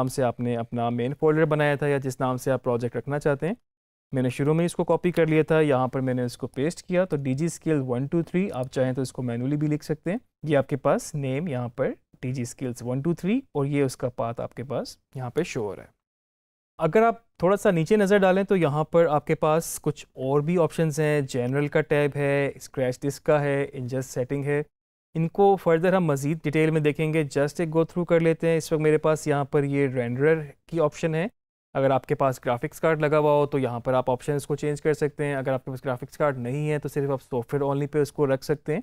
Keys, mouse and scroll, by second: 4.9 ctrl+v, 6.4-8.4 drag, 38.6 click.